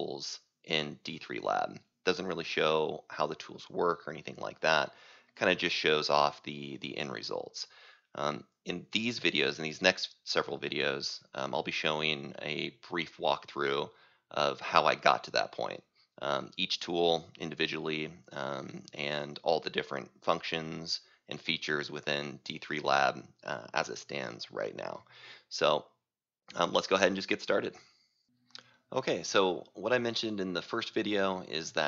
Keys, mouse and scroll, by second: 28.7-31.8 drag.